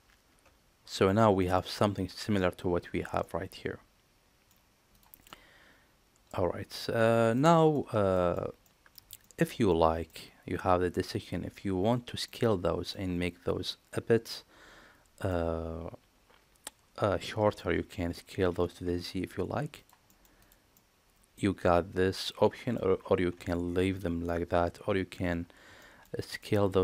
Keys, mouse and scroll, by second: 0.9 middle drag, 1.3 shift+middle click, 3.1-4.4 middle drag, 5.2-6.2 middle drag, 7.3-7.6 middle drag, 8.1 shift+middle drag, 8.6 middle drag, 9.1 shift+middle drag, 9.8 middle click, 10.9-11.8 drag, 12.2-12.8 middle drag, 15.2-17.5 middle drag, 18.3 s, 20.0 middle click, 20.4 drag, 20.7-22.6 middle drag, 22.8 ctrl+z, 23.5 ctrl+z, 24.2-25.0 middle drag, 25.7 shift+middle drag, 26.3 middle click.